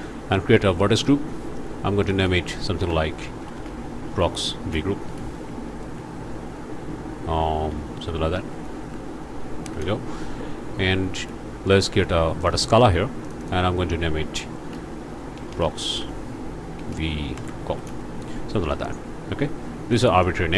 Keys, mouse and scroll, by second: 1.0 click, 2.0 click, 3.4-5.3 typing, 7.7-9.6 typing, 9.8 Return, 12.4 click, 13.2 click, 15.4-17.7 typing, 17.9 shift+Return, 19.9 middle click, 20.2 scroll up 2.